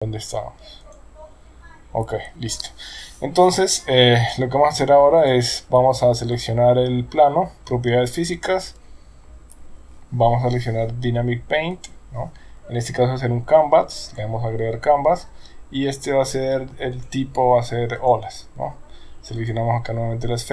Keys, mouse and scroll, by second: 0.8 click, 4.2 click, 5.3 click, 11.7 click, 14.0 click, 17.0-18.1 drag, 19.4 click.